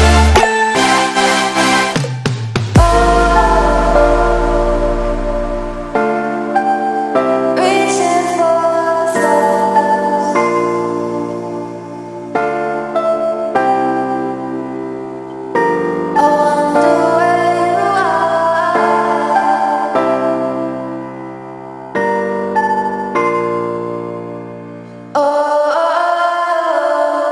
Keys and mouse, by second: 0.8 ctrl+a, 1.0 ctrl+v, 1.5 click, 3.3 click, 4.3 ctrl+c, 5.3 click, 8.4 ctrl+a, 8.6 ctrl+v, 9.1 click, 11.4 ctrl+c, 12.2 click, 14.9 ctrl+a, 15.1 ctrl+v, 15.5 click, 16.5 space, 16.7 click, 16.9 space, 18.7 click, 22.4-23.4 drag.